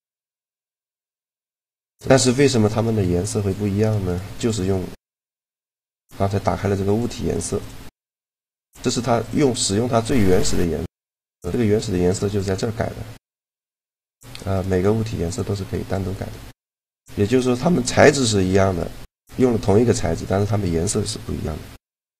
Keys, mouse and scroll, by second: 1.0-2.5 drag, 3.7 right click, 6.7-13.6 drag, 14.2-16.0 right drag, 14.8-16.5 drag, 16.7 middle click, 17.2-18.4 drag, 18.4-21.5 right drag.